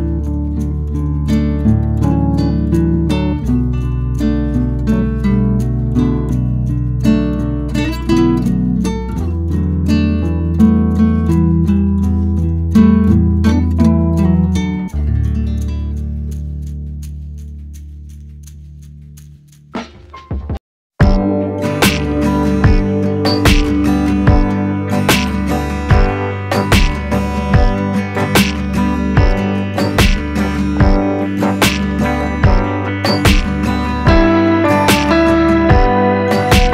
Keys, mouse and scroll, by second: 3.9 scroll down 1, 3.9-5.0 middle drag, 5.0 KP_0, 6.7 ctrl+c, 6.8 ctrl+v, 6.9 g, 8.2 click, 8.3 Tab, 8.5-13.4 typing, 10.1 Tab, 10.6 Tab, 11.9 Tab, 12.2 scroll up 1, 12.9 scroll up 1, 13.1 shift+middle drag, 15.8 KP_0, 16.2 click, 16.4-17.1 scroll down 5, 17.1 shift+middle click, 17.3-17.7 scroll up 4, 17.7 shift+right click, 17.9 shift+a, 20.3 s, 20.9 scroll up 1, 21.0 s, 23.2 click, 23.9 click, 24.8 ctrl+2, 25.1 ctrl+c, 25.3 ctrl+v, 25.4 g, 27.0-28.0 scroll down 6, 27.3 click, 28.0 shift+right drag, 28.3-29.4 shift+middle drag, 29.4-29.8 scroll up 4, 29.8 click, 30.0 shift+drag, 30.5 shift+click, 30.9 scroll down 2, 31.2 s, 33.5-33.9 scroll up 4, 33.9 click, 34.2-34.5 scroll down 2, 34.5 g, 35.7 click, 36.0 g.